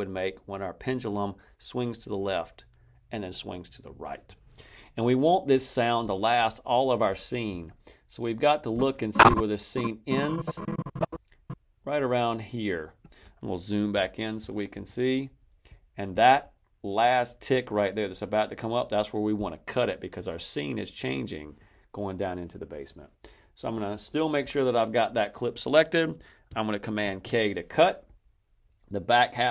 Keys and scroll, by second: 13.8 =, 26.9 super+k.